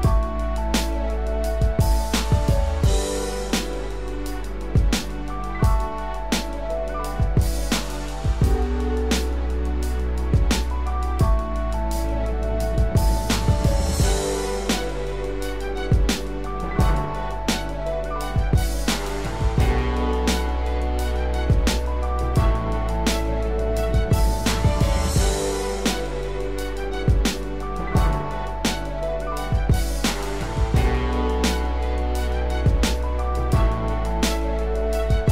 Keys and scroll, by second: 6.5 ctrl+Return, 9.4 ctrl+d, 10.1 ctrl+-, 10.7 ctrl+=, 21.8 ctrl+z, 27.3 ctrl+Return, 30.4 ctrl+0, 31.5 ctrl+=.